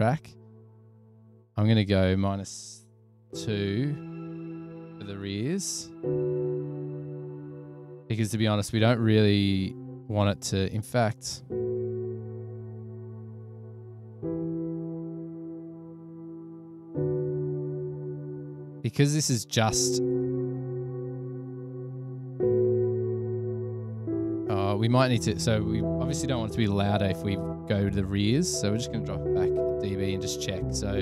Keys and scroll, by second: 2.7-3.9 typing, 5.0-5.9 typing, 12.2 -, 17.9 BackSpace, 18.1 BackSpace, 18.7 0, 18.8 Return, 21.6 typing, 26.2 -, 26.9 1, 27.0 Return, 29.1-29.9 typing.